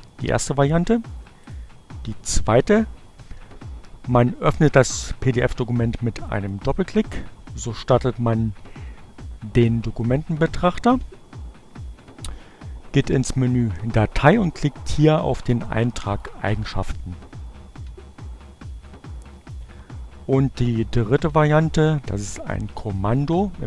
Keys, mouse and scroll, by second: 0.2 click, 2.8-5.3 drag, 8.2-9.4 drag, 11.3 click, 15.6 click, 18.2-19.2 drag, 20.9 click.